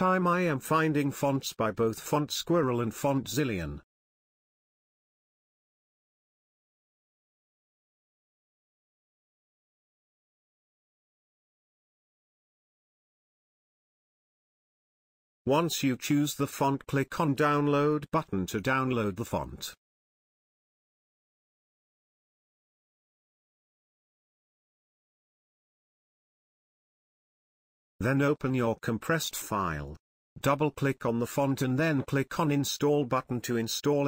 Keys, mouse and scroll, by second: 0.5 click, 5.1 click, 8.3-11.4 drag, 11.9 scroll up 1, 15.3 click, 18.3 click, 19.6 scroll down 1, 20.7 click, 25.5 click, 30.7 Return.